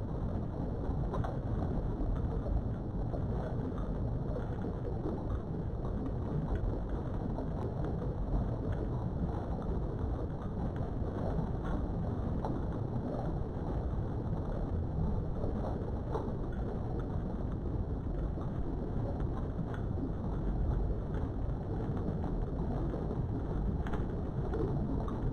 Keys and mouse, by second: 6.8 3, 10.1 middle click, 11.6 KP_3, 13.4 Tab, 14.3 Tab, 15.3 1, 20.7 j, 23.7 j, 25.1 shift+click.